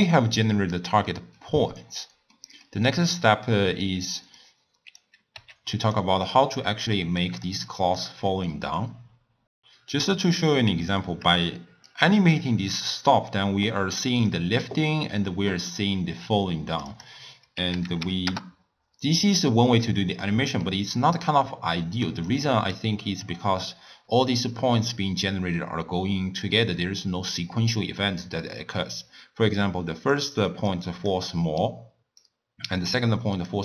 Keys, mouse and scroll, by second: 0.3-1.1 scroll up 2, 1.1 middle click, 1.7-2.3 scroll down 2, 2.3 middle click, 2.9-3.5 scroll down 4, 3.5 middle click, 4.4 click, 5.4 g, 6.5-8.1 typing, 7.2 click, 7.7 click, 10.1-11.9 scroll up 5, 10.1-10.5 middle drag, 11.9-14.9 drag, 16.9-19.3 drag, 19.3-21.2 middle drag, 21.2-22.4 drag, 22.7 click, 24.0-33.6 typing, 30.1 click, 30.7 click, 31.6 right click, 33.3 click.